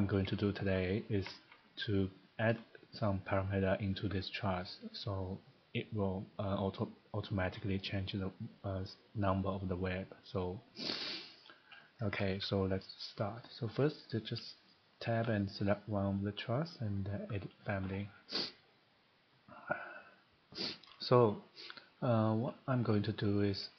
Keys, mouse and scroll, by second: 0.0 middle click, 0.2 middle click, 0.7 shift+middle click, 0.9 scroll, 1.2 Escape, 1.3 Escape, 11.4 middle click, 12.1 middle click, 12.1 Escape, 12.3 Escape, 15.1 Tab, 15.7 click, 17.7 click, 20.9 scroll, 21.9 shift+middle click, 22.4-23.1 shift+scroll, 23.5 middle click.